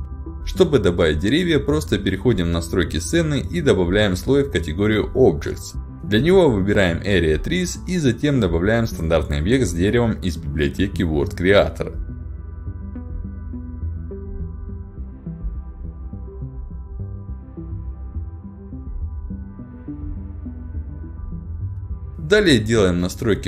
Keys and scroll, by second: 17.8 w, 20.0 a, 20.9 d.